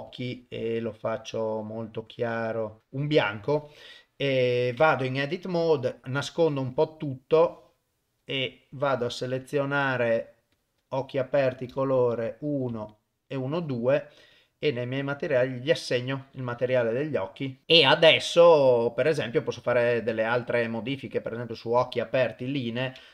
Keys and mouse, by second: 0.1 click, 4.8 Tab, 5.8 click, 6.0 click, 6.8 click, 7.4 click, 10.5 click, 11.7 click, 12.9 shift+click, 14.3 click, 15.4 click.